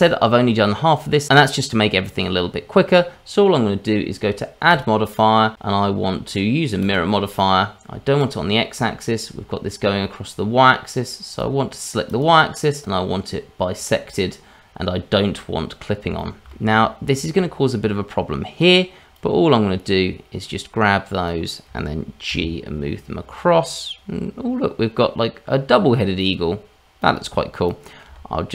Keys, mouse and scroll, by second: 0.0 shift+middle click, 6.9 click, 8.2 click, 11.3 click, 12.1 click, 15.5 scroll up 1, 16.1 scroll up 1, 16.2 shift+middle click, 16.7-18.7 scroll up 1, 19.1 click, 27.0 click, 27.7 click, 28.1 g.